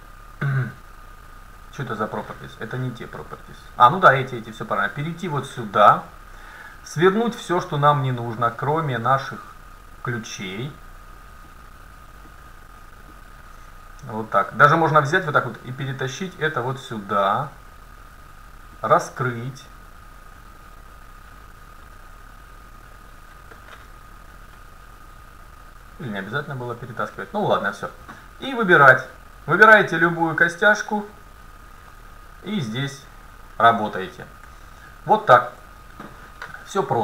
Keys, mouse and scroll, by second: 0.2-0.8 scroll down 1, 0.8-2.0 middle drag, 5.1-7.1 drag, 7.2-21.2 drag, 28.6-32.0 right drag, 30.9-32.8 middle drag, 32.5-34.3 drag, 35.1-36.8 middle drag.